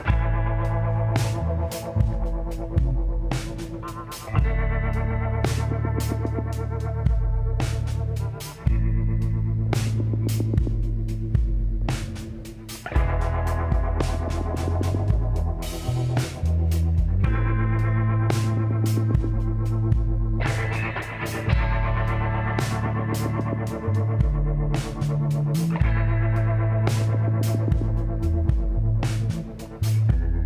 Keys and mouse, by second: 2.4-5.4 drag, 5.0 z, 7.1 KP_7, 7.7 middle click, 11.2 z, 12.6-14.3 drag, 13.9 e, 20.7-22.3 middle drag, 22.1 e, 27.0 s, 29.8 ctrl+r.